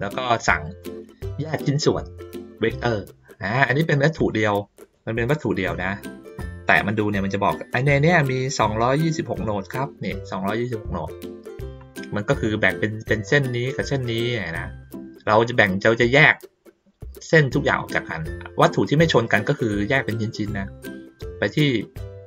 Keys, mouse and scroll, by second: 4.2 click, 4.8 click.